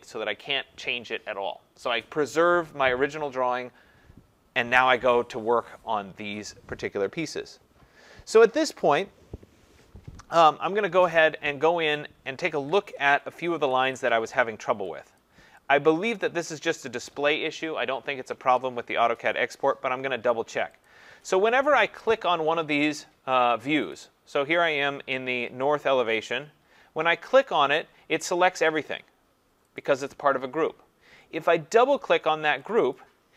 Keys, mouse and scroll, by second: 12.7 click, 13.1 ctrl+=, 13.3 ctrl+=, 13.5 ctrl+=, 13.7 ctrl+=, 15.9 click, 15.9 click, 16.0-16.7 click, 16.1 click, 16.2 click, 16.3 click, 16.7 click, 19.8 click, 20.9 click, 22.9 click, 23.9 click, 28.7 click, 29.8 click, 32.7 click, 32.9 click.